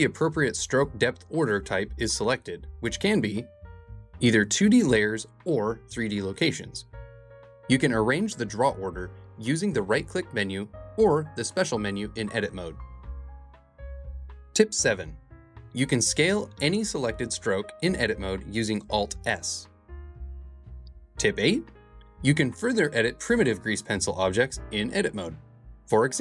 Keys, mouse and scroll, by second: 2.9 click, 3.5-5.3 drag, 5.3 Tab, 5.4-8.0 typing, 11.1 click, 11.6-13.3 shift+drag, 14.1 click, 14.5 Tab, 14.5 1, 16.2 alt+s, 18.5 KP_0, 19.5 i, 21.7-23.3 drag, 24.1 x, 25.2 click, 25.9 shift+click.